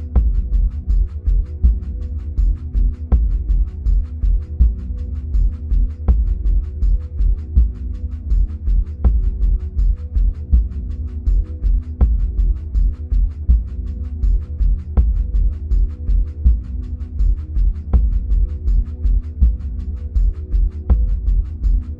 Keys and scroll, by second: 10.1 Up.